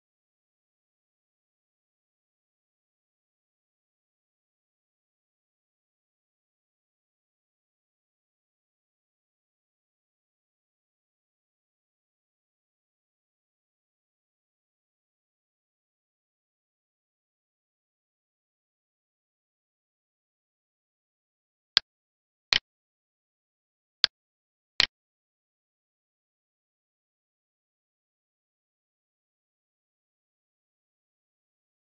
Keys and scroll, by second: 4.1 space, 11.3 space, 11.6 space, 27.4 Down.